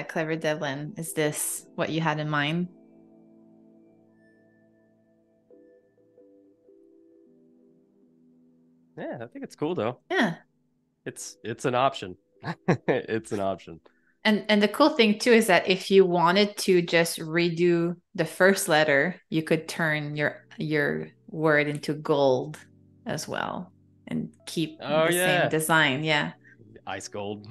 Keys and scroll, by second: 5.5 space, 10.7 super+=, 11.5 super+-, 12.8 Escape, 13.6 space.